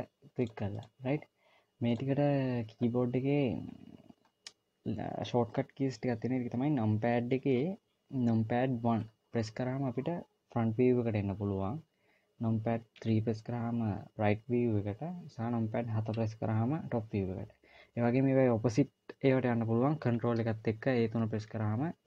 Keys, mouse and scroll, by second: 0.9 click, 1.2 click, 2.3 click, 9.3 KP_1, 13.4 KP_3, 16.5 KP_7.